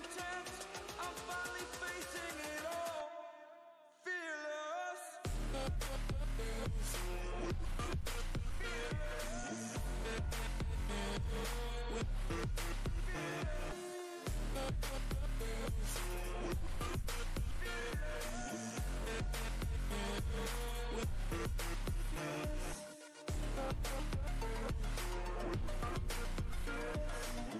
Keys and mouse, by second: 0.6 click, 4.6 click, 22.5-25.1 drag, 25.3 typing.